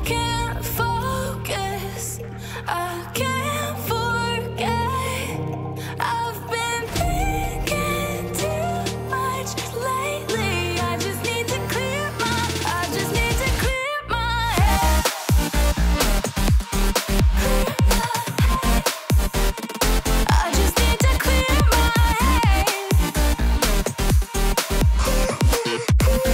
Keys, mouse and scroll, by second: 3.7 c, 4.9 Return, 8.3 Escape.